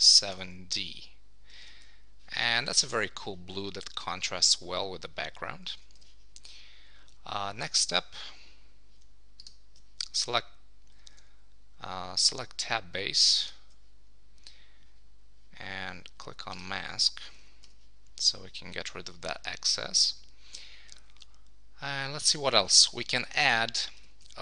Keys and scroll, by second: 0.8 Return, 1.6 super+Return, 5.7 super+s, 11.0 super+d, 17.4 super+s.